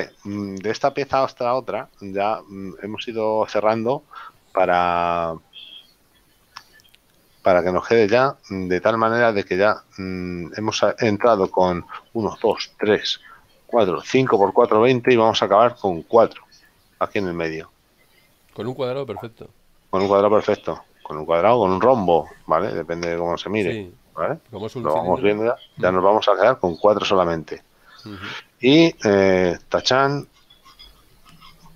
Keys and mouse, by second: 0.6 shift+middle click, 11.3 shift+middle click, 23.3 KP_7, 29.7 click.